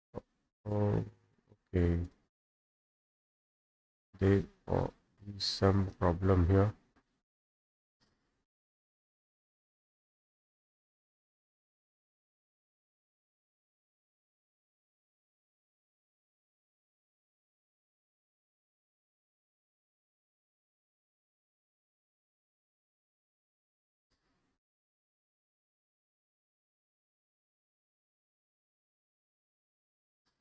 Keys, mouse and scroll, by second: 0.3 middle click, 0.6 middle click, 0.9 scroll, 2.1 click, 4.9 click, 7.0 click, 7.4 Escape, 7.7 Escape, 7.9 Escape, 8.8 click, 9.2 Escape, 9.7 click, 10.4 Escape, 11.2 click, 12.0 Escape, 12.3 Escape, 12.9 click, 13.4 Escape, 13.7 Escape, 15.8 click, 18.5 click, 20.2 click, 20.7 Escape, 20.8 Escape, 21.2 click, 22.8 click, 25.3 click, 25.7 Escape, 26.0 Escape, 26.5 click, 28.1 Escape, 28.4 Escape, 28.9 click, 29.5 click.